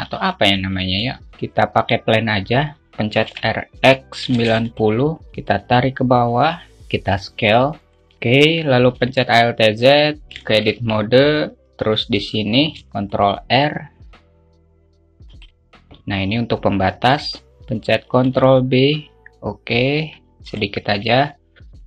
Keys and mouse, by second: 1.2 shift+a, 4.0 r, 5.8 click, 6.9 s, 7.9 click, 9.4 alt+shift+z, 9.6 alt+shift+middle click, 10.9 alt+shift+middle drag, 11.3 Tab, 13.0 ctrl+r, 18.7 ctrl+b.